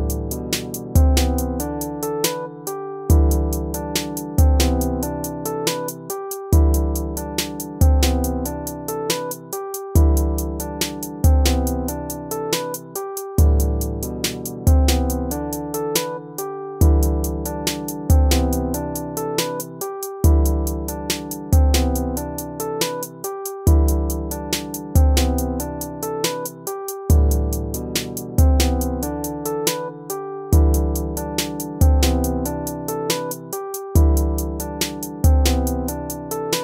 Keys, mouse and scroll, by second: 9.5 right click, 11.4 right click, 11.8 BackSpace, 12.2 ctrl++, 13.1 ctrl+-, 16.0 ctrl++, 21.2 ctrl++, 22.5 ctrl+-, 23.7 ctrl++, 24.2 ctrl+-, 26.4 ctrl++, 29.0 ctrl++, 30.7 ctrl+-, 33.5 ctrl+-.